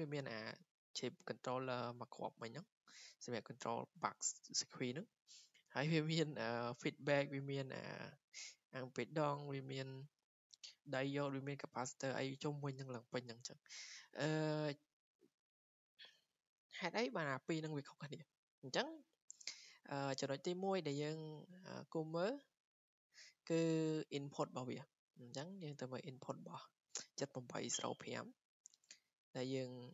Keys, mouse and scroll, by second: 16.8 click, 17.0 click, 17.1 click, 17.7 click, 20.0 click, 20.2 click, 21.4 click, 21.9 click, 25.0 click, 27.7-29.9 drag.